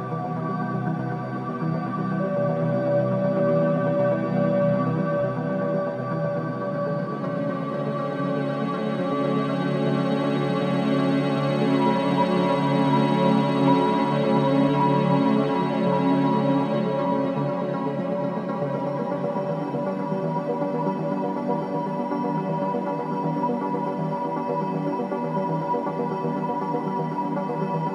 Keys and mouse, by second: 2.0-4.0 drag, 2.5 z, 5.0 s, 17.6 Tab, 20.8 ctrl+z, 21.1 ctrl+z, 22.2 ctrl+z, 22.7-25.6 drag, 25.6 Tab, 26.0 middle click.